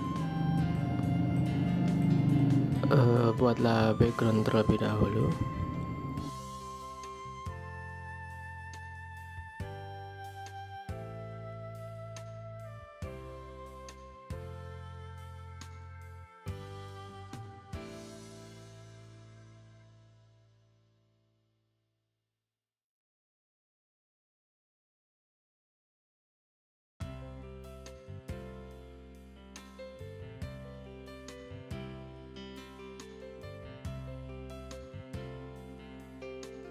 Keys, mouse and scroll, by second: 4.9 alt+scroll down 1, 5.2 space, 8.0 space.